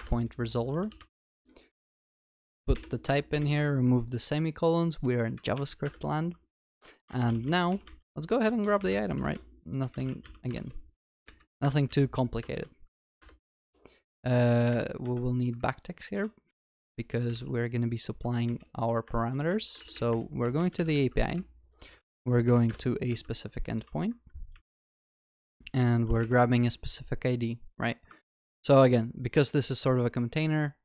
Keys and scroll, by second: 0.0 Return, 11.6 Return, 22.7 Return, 28.3 ctrl+s.